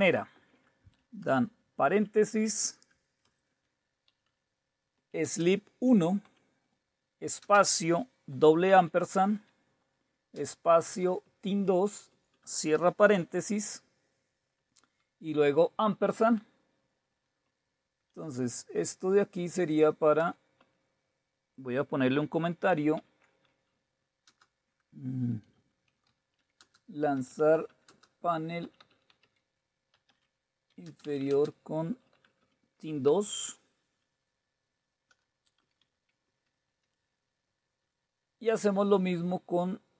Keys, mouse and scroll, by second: 0.1 Left, 0.3 Left, 2.0 shift+9, 3.1-5.2 typing, 6.2 typing, 7.4 typing, 8.7 typing, 10.4 typing, 11.0 Right, 11.2 Right, 11.4 Right, 11.7 typing, 13.3 typing, 14.6 typing, 16.1-21.1 typing, 17.5 Up, 18.1 Left, 20.2 Return, 22.7-33.0 typing, 35.1 Return, 35.6 Down, 35.8 Down, 36.3 Down, 36.7 Delete, 36.9 Delete, 37.0 Delete, 37.2 Delete.